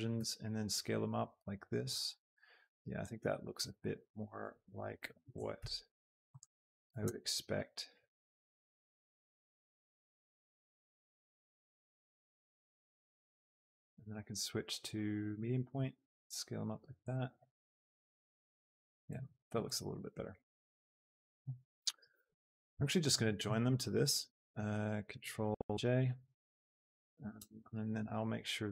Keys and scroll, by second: 0.1 shift+s, 5.3 Tab, 5.6 s, 10.8 s, 15.9 s, 17.7 Tab, 25.1 ctrl+j, 27.3 shift+Tab.